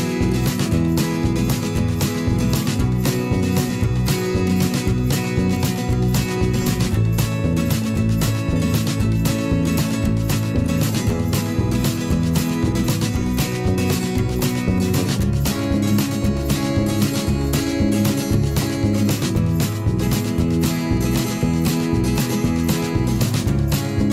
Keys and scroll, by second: 1.9 ctrl+z.